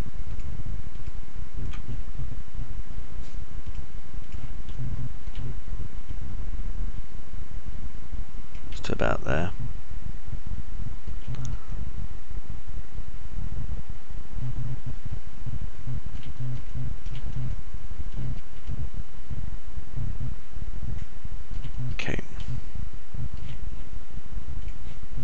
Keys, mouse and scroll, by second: 1.1 ctrl+right click, 5.6 alt+click, 5.6 alt+middle click, 5.6 alt+right click, 7.0 right click, 9.6-12.0 alt+drag, 9.6-12.0 alt+middle drag, 9.6-12.0 alt+right drag, 12.1 click, 12.1 middle click, 12.1 right click, 12.5-17.1 alt+drag, 12.5-17.1 alt+middle drag, 12.5-17.1 alt+right drag, 17.6 alt+click, 17.6 alt+middle click, 17.6 alt+right click, 19.5-22.5 alt+middle drag, 22.3 alt+drag, 22.3 alt+right drag, 23.5 alt+click, 23.5 alt+middle click, 23.5 alt+right click.